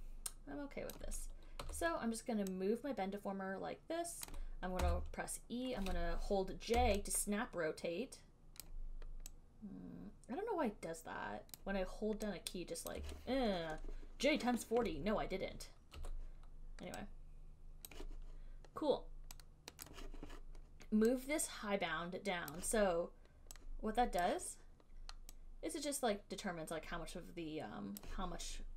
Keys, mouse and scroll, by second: 1.1 alt+click, 1.8 w, 4.5 click, 5.0 e, 7.0-13.2 typing, 8.8 click, 11.8 click, 13.2 click, 16.2 w, 18.1 click, 20.2 click, 22.7 click, 24.4 click, 28.2 click.